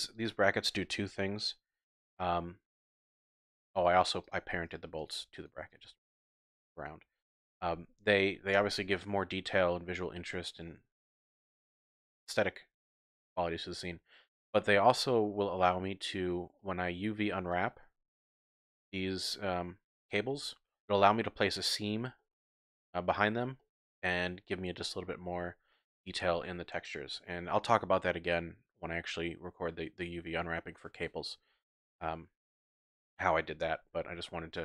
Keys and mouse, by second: 3.4 g, 3.7 right click, 5.0 shift+click, 10.7-11.7 middle drag, 11.7 click, 12.0-14.3 middle drag, 14.3 click, 15.0 click, 16.6-17.0 drag, 17.5 click, 18.5 shift+click, 19.2 shift+click, 22.2-22.5 middle drag, 23.6-24.0 shift+drag, 34.3 Tab.